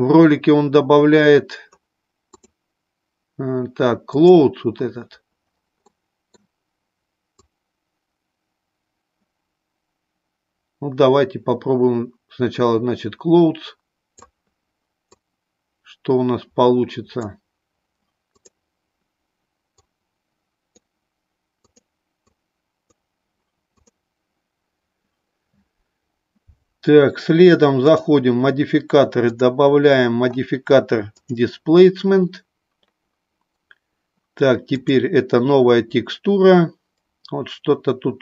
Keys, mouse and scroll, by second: 2.4-4.4 drag, 5.8 middle click, 7.2-14.4 drag, 15.1-18.5 drag, 19.8-21.8 drag, 22.3-23.9 drag, 29.1-31.5 drag, 34.6 click.